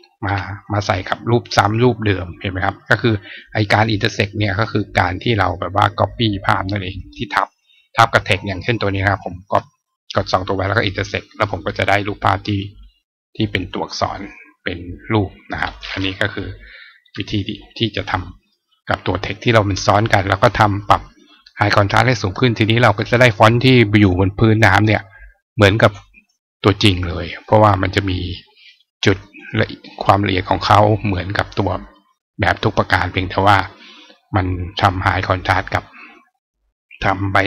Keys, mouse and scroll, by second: 2.4-3.8 drag, 5.9 click, 9.0 shift+click, 10.5 click, 11.8 click, 12.6 click, 15.5 click, 19.1 click, 22.9 click, 23.9 click, 26.9 click, 28.5 right click, 29.0 right click, 30.1 click, 31.7 right click.